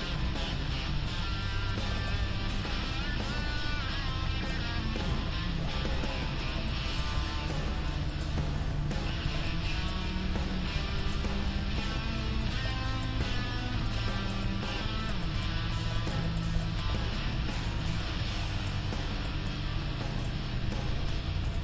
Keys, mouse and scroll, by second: 1.1 right click, 1.9-3.4 drag, 1.9-5.9 middle drag, 2.1 g, 5.1 g, 6.7-7.9 middle drag, 7.2 g, 7.9-9.6 right drag, 8.4 g, 9.4 middle click, 9.6 middle click, 10.4 g, 11.8-13.2 right drag, 12.6 middle click, 13.2 g, 14.3-15.8 middle drag, 15.8-17.6 right drag, 16.9 g, 17.6 middle click, 19.7 middle click, 20.1-21.6 middle drag, 20.1 right click, 21.5-21.6 right drag.